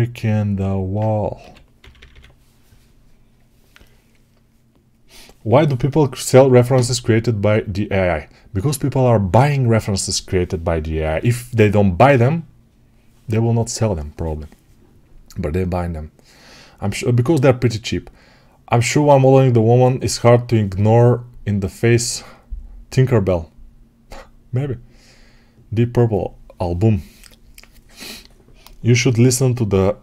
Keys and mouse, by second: 1.3 g, 1.8 g.